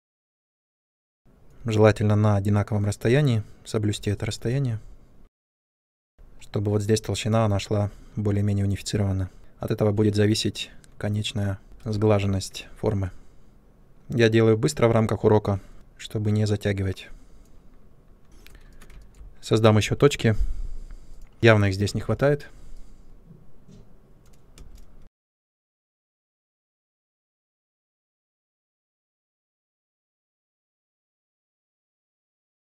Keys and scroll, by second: 18.2 space, 21.8 shift+c, 24.5 space, 25.2 3, 26.6 3, 28.6 space, 30.1 ctrl+space, 30.2-32.4 typing.